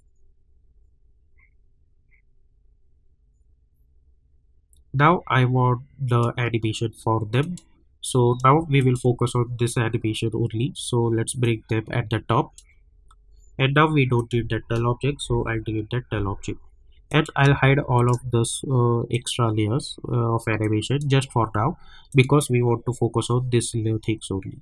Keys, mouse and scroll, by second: 5.7 typing, 7.4 click, 8.8 shift+click, 11.6-14.1 drag, 17.0 click, 17.9-22.1 shift+drag.